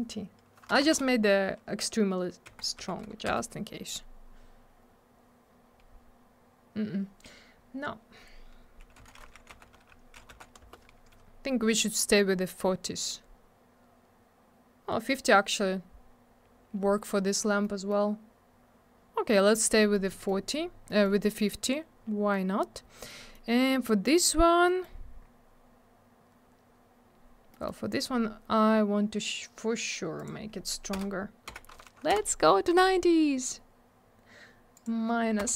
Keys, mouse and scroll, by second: 0.7 BackSpace, 2.8 0, 3.3 Return, 9.7 Tab, 10.2 5, 10.6 Return, 15.4 scroll down 1, 17.7 middle click, 19.5 middle click, 19.6 middle click, 19.8 middle click, 19.9 double middle click, 20.1 middle click, 20.3 middle click, 20.5 scroll up 1, 20.9 middle click, 21.3 middle click, 21.6-22.2 scroll up 1, 22.5 scroll down 1, 23.2 middle click, 24.6 scroll up 1, 24.7 middle click, 24.8 middle click, 27.5 middle click, 27.7 middle click, 27.9 click, 28.0 click, 30.2 click, 30.2 click, 30.9 BackSpace, 31.5 9, 32.1 Return, 34.7 click, 34.8 click, 35.4 BackSpace.